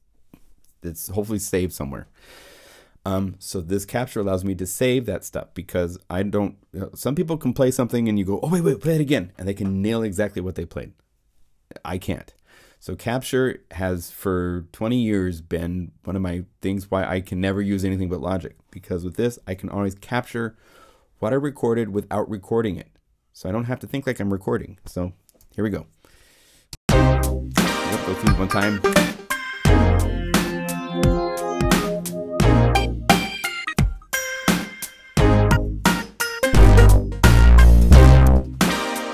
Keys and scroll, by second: 25.4 0, 26.7 Home.